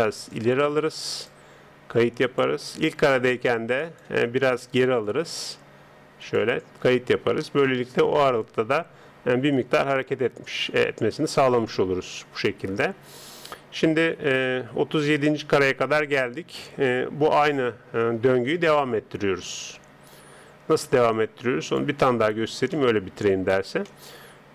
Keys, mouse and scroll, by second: 0.3 click, 17.1-19.1 middle drag, 18.5 click, 22.3 middle click, 22.8-24.5 middle drag.